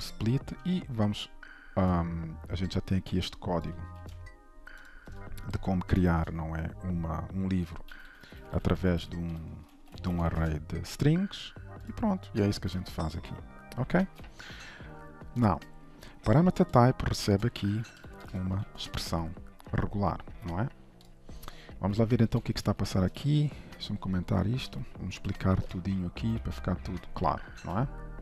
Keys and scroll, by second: 4.0 ctrl+c, 5.5 shift+Return, 6.1 shift+Return, 14.1 ctrl+s, 18.7 ctrl+s, 26.4 ctrl+/, 27.5 ctrl+s.